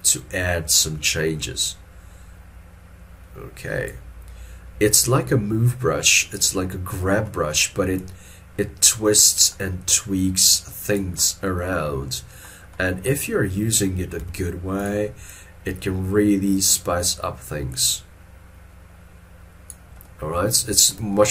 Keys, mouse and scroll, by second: 14.3 middle click, 15.4 double click.